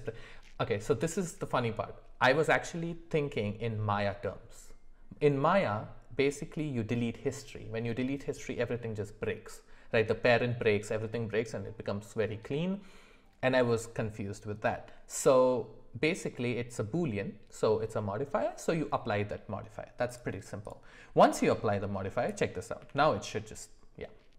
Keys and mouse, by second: 21.2 middle click, 22.8 g.